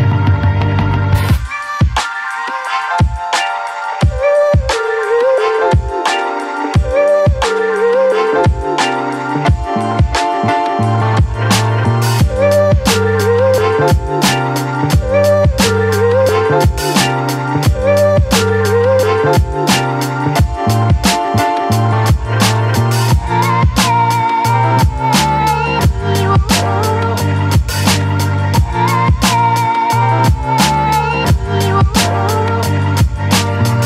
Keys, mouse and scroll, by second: 3.8-8.6 drag, 8.6-17.9 drag, 23.2-24.3 drag, 26.8-28.6 shift+drag, 30.1-33.3 drag, 33.3 right click.